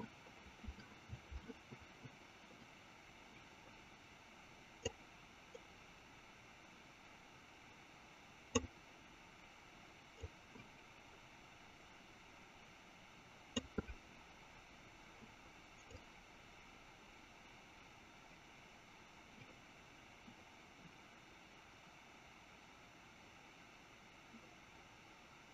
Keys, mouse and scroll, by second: 4.7-9.4 drag, 10.5-14.4 drag, 15.9-25.5 drag.